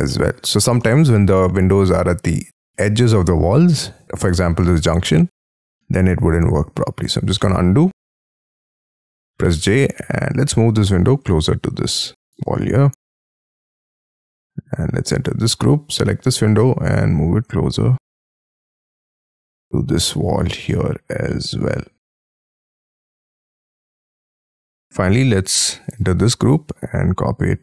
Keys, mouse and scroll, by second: 0.1 middle click, 0.5-0.9 scroll up 9, 6.3 ctrl+z, 7.4 middle click, 8.0 ctrl+z, 8.2-8.6 scroll down 11, 9.2 j, 9.4 middle click, 10.1 m, 10.1 scroll up 4, 12.2 shift+click, 12.7-13.3 scroll down 13, 13.5 shift+middle click, 14.2 Escape, 14.8 double click, 15.1 double click, 15.4 m, 15.5-17.4 scroll up 10, 18.0 shift+scroll down 6, 18.4 shift+middle click, 19.0 shift+middle click, 19.9 shift+middle click, 20.3 shift+scroll down 3, 20.7 shift+middle click, 22.5 shift+click, 23.5 shift+middle click, 24.1 space, 24.3 Escape, 24.9 scroll down 6, 25.3 scroll up 5, 25.6 double click, 25.9 double click, 26.2 m.